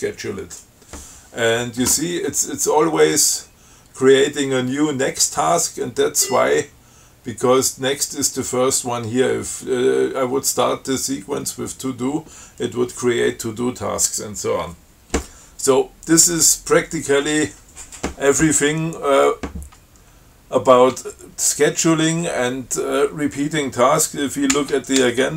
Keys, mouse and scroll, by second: 5.7 scroll up 2, 6.4 scroll up 2, 24.8 ctrl+c, 25.2 ctrl+a.